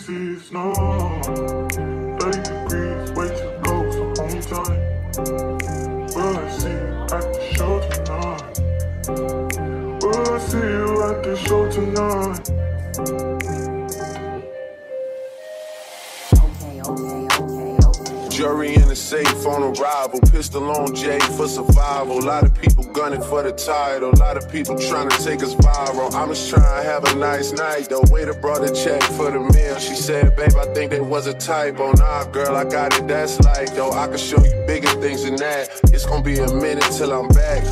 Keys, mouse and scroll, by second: 1.5-22.2 middle drag, 23.7-25.0 middle drag.